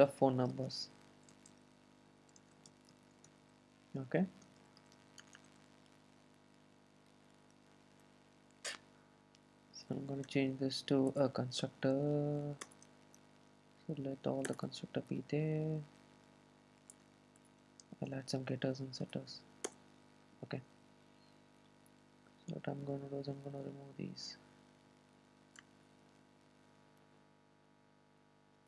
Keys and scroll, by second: 11.9 super+n, 17.9 super+n.